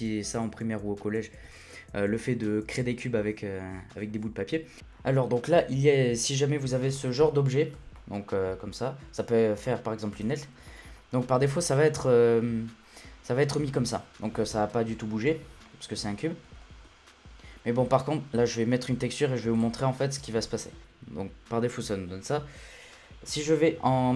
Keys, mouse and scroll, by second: 4.8-5.9 shift+middle drag, 5.9-7.0 drag, 7.0-7.7 shift+middle drag, 7.7 Tab, 8.0-10.2 middle drag, 10.2 Tab, 10.7-13.9 shift+middle drag, 15.6-19.5 shift+middle drag, 19.5-20.8 drag, 20.8 middle click, 21.0-24.1 scroll up 3.